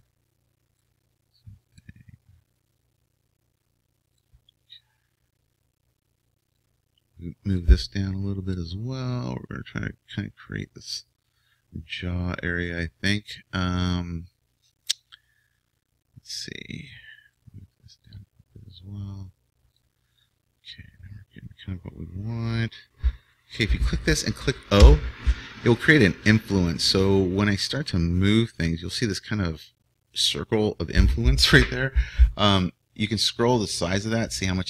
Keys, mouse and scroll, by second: 6.6-8.5 right drag, 7.5 click, 8.5-10.7 drag, 10.7-19.6 right drag, 18.1-19.8 drag, 20.2-22.2 middle drag, 23.4-30.0 right drag, 24.9 o, 28.5-31.0 drag.